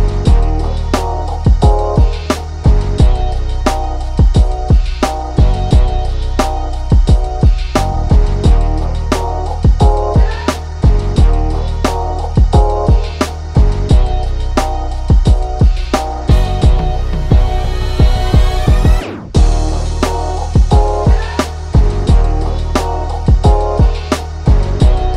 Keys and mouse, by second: 1.2 Up, 1.8-3.1 drag, 3.1 Down, 3.3 Right, 3.8 click, 4.9-6.5 drag, 6.5 Left, 7.1-8.8 drag, 9.8-16.6 drag, 16.8 click, 18.9-22.0 drag, 22.1-23.3 drag, 23.3-25.1 drag.